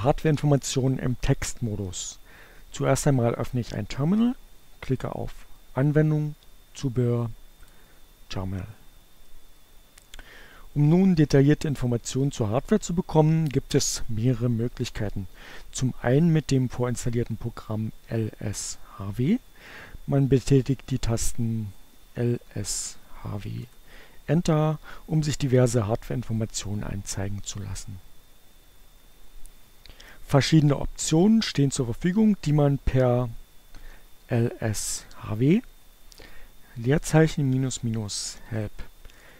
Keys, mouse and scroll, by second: 3.5 click, 6.2 click, 8.0 click, 20.3-21.5 typing, 21.8 Return, 31.8-33.7 typing, 34.8-37.1 typing, 38.0 Return.